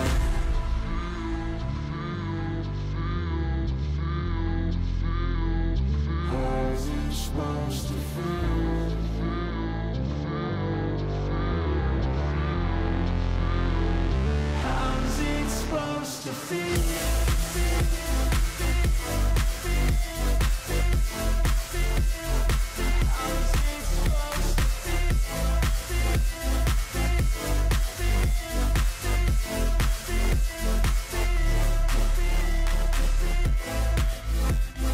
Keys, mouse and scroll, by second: 9.4 ctrl+alt+shift+e, 23.7 typing, 26.4 4, 32.3 ctrl+=, 32.8 ctrl+=, 33.4 ctrl+-.